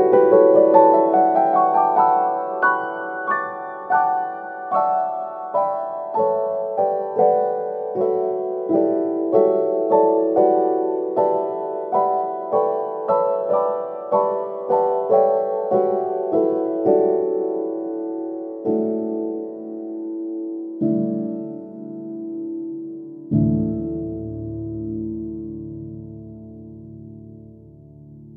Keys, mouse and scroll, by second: 7.2 click, 7.7-9.4 middle drag, 9.4-11.0 drag, 13.2 shift+click, 15.3 ctrl+l, 18.8 middle click, 19.5 click, 21.0-24.5 drag, 25.6-26.7 drag, 27.0 middle click, 27.7 click.